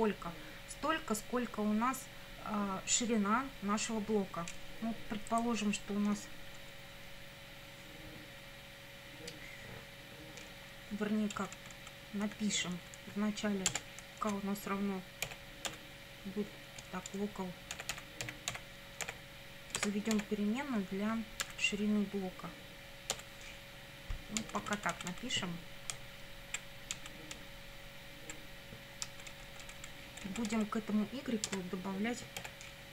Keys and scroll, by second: 11.4 Down, 12.3 Up, 13.7 Return, 14.2 Up, 15.3 k, 15.7 =, 16.8-20.1 typing, 21.5 =, 23.1 0, 24.4 Down, 25.9 Right, 27.0 Down, 27.4 Right, 32.4 k.